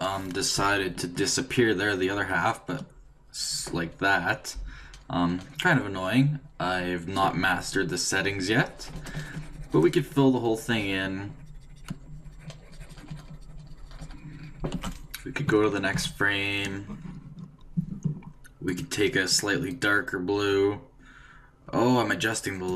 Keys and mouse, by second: 0.5-2.3 d, 2.3-5.5 drag, 14.6 d, 14.7 d, 15.9 Right, 15.9 d, 18.7-20.5 drag.